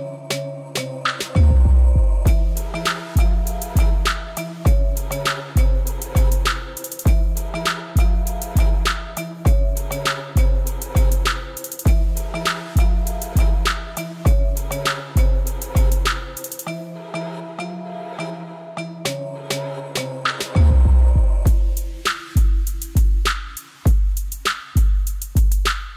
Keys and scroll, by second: 5.1 b, 5.5 f, 6.5 9, 6.8 0, 7.8 Return, 9.6 0, 9.8 ., 10.0 1, 10.7 Return, 16.9-17.7 typing, 19.4 Return.